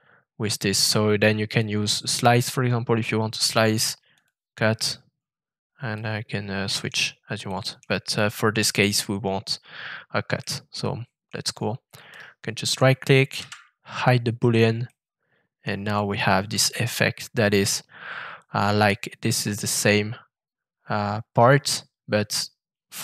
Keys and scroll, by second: 13.3 <.